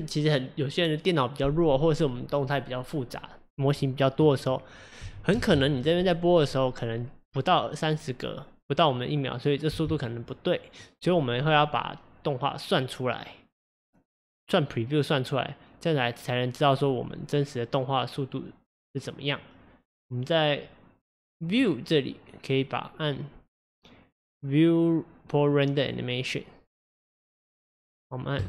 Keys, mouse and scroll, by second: 5.3 space, 9.8 space.